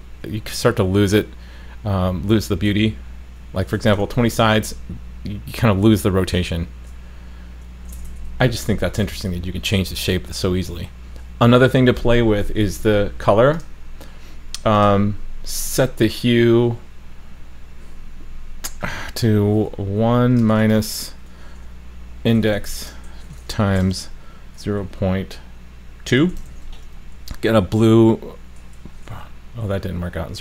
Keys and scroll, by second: 4.0 super+s, 8.7 super+s, 26.5 super+s.